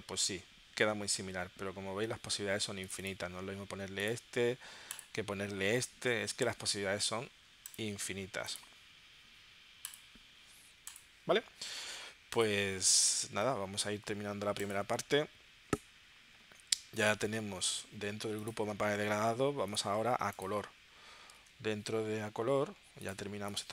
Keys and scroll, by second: 21.4 super+Tab.